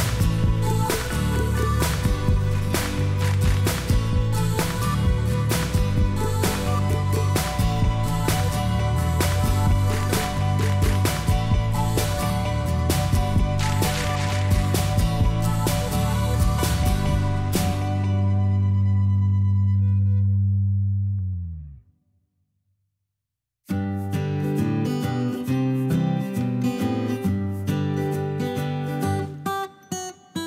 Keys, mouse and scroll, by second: 0.0 m, 16.3 shift+o, 18.4 h, 20.1 o, 22.8 o.